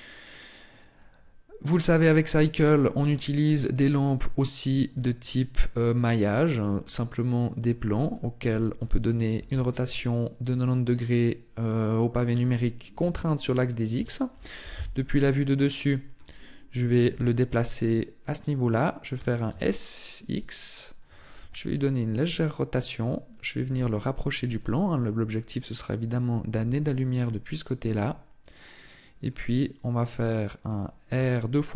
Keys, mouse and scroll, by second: 0.8 middle click, 1.8 shift+middle click, 2.4 middle click, 3.1 shift+middle click, 4.7 shift+a, 14.4 KP_7, 15.5 shift+middle click, 16.9 g, 18.2 click, 20.2 click, 21.2 r, 23.2 click, 23.5 g, 24.2 click, 27.4 click, 27.4 g, 27.7 r, 28.3 click, 29.1 middle click, 31.0 r.